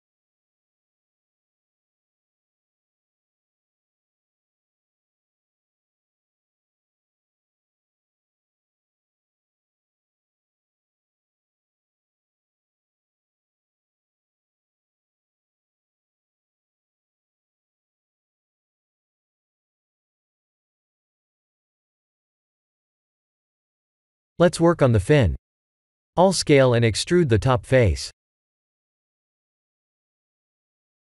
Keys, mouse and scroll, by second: 1.4 Tab, 1.7 middle click, 1.8 middle click, 2.9 middle click, 3.0 middle click, 3.3 scroll down 3, 4.3 KP_1, 5.2 shift+click, 5.9 click, 6.3 right click, 7.3 shift+middle click, 8.2-8.6 scroll up 1, 8.6 Tab, 9.3 middle click, 11.0 click, 11.4 middle click, 13.0 middle click, 14.2 middle click, 15.3 shift+click, 15.7 middle click, 16.3 s, 17.8 Tab, 18.2 middle click, 18.3 middle click, 19.6 shift+middle click, 20.0 shift+middle click, 20.3 middle click, 20.5 middle click, 20.8 KP_1, 21.5 shift+z, 22.2-22.6 scroll up 3, 22.8 middle click, 25.0 Tab, 25.5 2, 25.8 click, 26.6 alt+click, 27.3 g, 29.6 alt+click, 30.2 g.